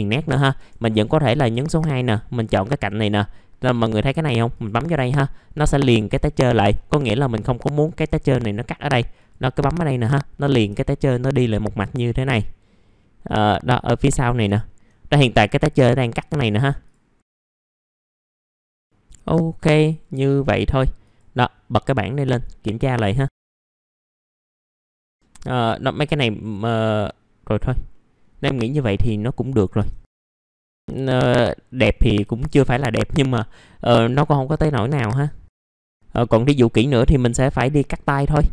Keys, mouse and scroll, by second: 0.9 2, 1.6 click, 6.3 middle click, 6.5-6.8 scroll down 1, 6.8 middle click, 7.1-7.8 scroll up 1, 7.8-10.6 drag, 10.8 scroll down 1, 11.2 alt+middle click, 12.0 middle click, 12.3 alt+middle click, 13.4 alt+middle click, 13.8-14.2 scroll up 1, 14.5 click, 15.0 alt+middle click, 17.2 click, 17.4 scroll down 1, 17.5 alt+middle click, 17.7 alt+middle click, 18.1 scroll up 1, 18.3 click, 19.3 alt+middle click, 19.9 scroll down 1, 20.2 middle click, 20.5 scroll up 1, 21.5 click, 23.1 middle click, 23.5 click, 24.1 middle click, 24.5 click, 25.0 middle click, 25.5-26.5 scroll up 1, 27.3-28.4 scroll down 1, 28.4 middle click, 29.4 alt+middle click, 30.2 scroll down 1, 30.7 scroll up 1, 30.8 alt+middle click, 31.6 scroll down 1, 32.0 alt+middle click, 32.5 middle click, 32.9 alt+middle click, 35.5 scroll up 1, 35.9 click, 37.9 middle click.